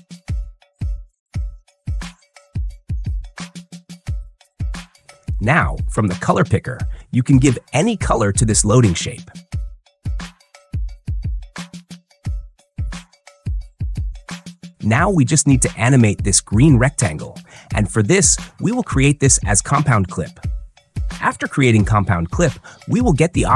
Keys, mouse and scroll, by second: 1.1-1.6 drag, 3.2 click, 9.6-10.6 drag, 13.1-14.1 drag, 14.7-15.8 drag, 18.8 right click, 20.5 click.